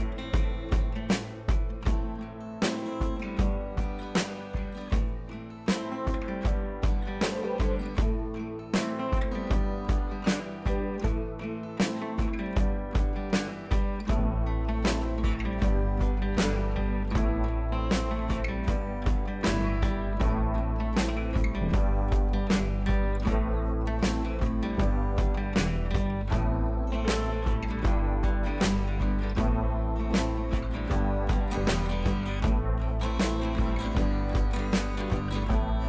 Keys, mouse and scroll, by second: 6.1-9.6 drag, 10.2 scroll down 1, 11.1 scroll down 1, 11.3 scroll up 1, 11.8 scroll down 1, 12.4 click, 17.9 click, 18.0 ctrl+shift+i, 19.4 ctrl+z, 22.3 click, 24.2 click, 26.1 ctrl+z, 29.1 click, 33.2 click, 33.6 ctrl+t, 34.2 click.